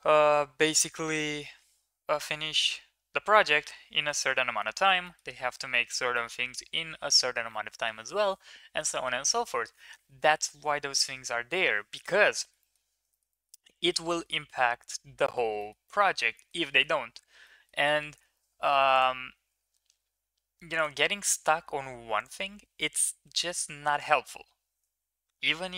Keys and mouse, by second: 4.7 shift+middle click, 5.0 middle click, 5.8 shift+middle drag, 6.2 middle click, 12.3 shift+middle click, 12.6 middle click, 13.0 shift+middle drag, 13.3 middle click, 13.7 shift+middle click, 14.0 middle click, 15.5 shift+middle click, 15.8 middle click, 16.3 shift+middle click, 16.7 middle click, 17.4 middle drag, 18.9-20.7 drag, 22.3-23.3 drag.